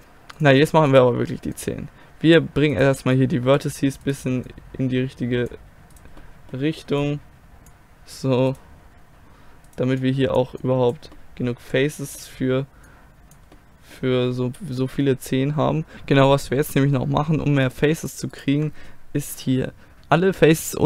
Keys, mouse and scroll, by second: 6.2-8.5 middle drag, 11.2-12.9 middle drag, 12.9 click, 13.6-14.9 middle drag, 15.9 ctrl+z, 17.0-20.8 middle drag.